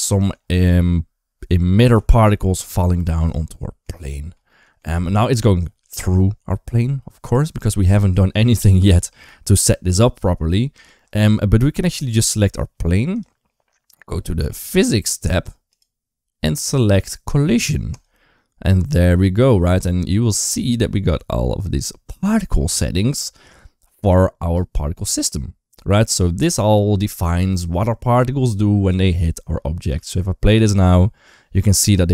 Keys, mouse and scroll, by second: 1.8 KP_1, 2.1 KP_3, 3.5 shift+middle click, 3.9 shift+middle click, 4.3 middle click, 7.2 shift+middle drag, 11.7 click, 29.8 space.